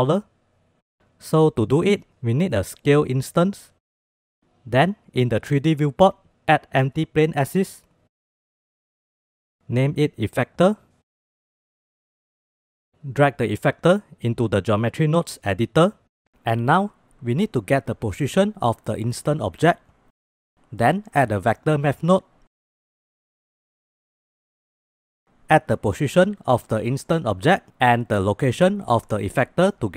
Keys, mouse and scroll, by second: 1.6 shift+a, 6.1 shift+a, 9.4-12.1 shift+drag, 10.1 f, 12.5-15.0 drag, 17.1 shift+a, 21.6 shift+a, 25.6-26.7 drag, 27.1 click, 27.8-29.3 drag.